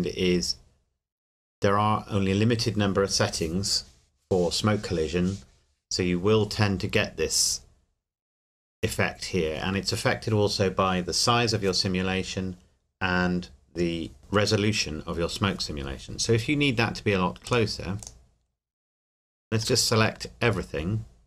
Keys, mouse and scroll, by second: 17.4 click, 18.5 scroll down 1, 19.7 a.